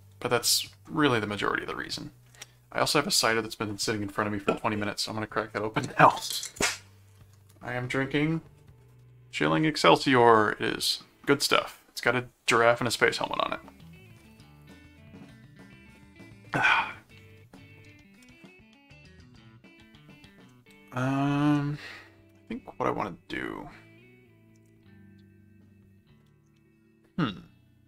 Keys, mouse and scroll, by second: 0.4 middle click, 18.4 middle click, 19.6 middle click, 21.5-26.3 middle drag.